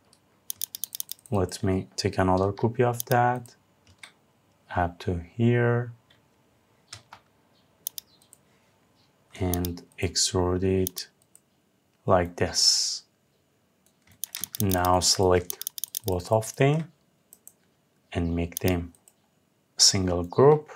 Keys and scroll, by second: 6.5 Left.